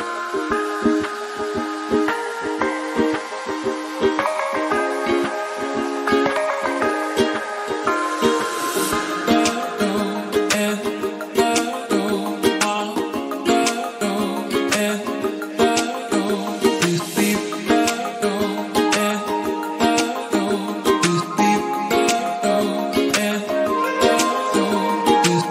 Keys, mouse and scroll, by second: 0.3-1.4 scroll up 4, 2.9-4.4 shift+middle drag, 4.4 click, 6.3-6.8 drag, 6.9-7.3 scroll down 13, 7.5 click, 8.6 click, 9.3-9.7 scroll down 3, 9.9 click, 10.2 KP_0, 10.5-11.3 scroll up 3, 11.3 drag, 11.6 click, 12.3 t, 13.3-19.8 drag, 20.1 click.